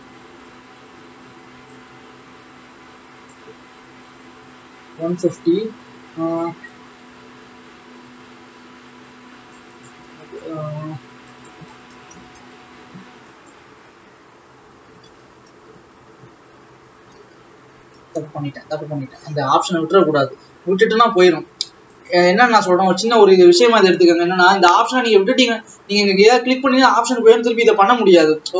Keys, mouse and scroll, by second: 0.1-0.6 scroll down 6, 1.3-1.8 scroll down 1, 1.8 click, 6.8-10.1 drag, 11.4-13.5 drag, 15.6 ctrl+z, 17.8 ctrl+z.